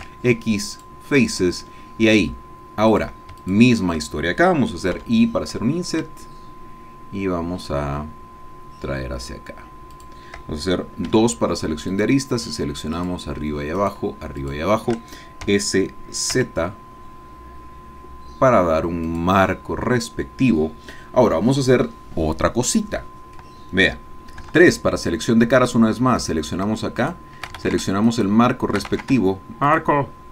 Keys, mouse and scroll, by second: 0.7 click, 1.8-2.8 scroll down 1, 2.9 click, 3.4 shift+click, 5.0 i, 10.0 shift+click, 11.2 2, 12.1 click, 13.1 shift+click, 13.8 shift+click, 14.4 shift+click, 15.4 s, 16.3 z, 19.1-23.4 drag, 23.4 click, 24.4 3, 25.1-26.4 scroll up 1, 26.4 click, 27.1 shift+click, 27.6 ctrl+shift+z, 28.1 ctrl+shift+click, 29.0 ctrl+shift+z, 29.8 shift+click.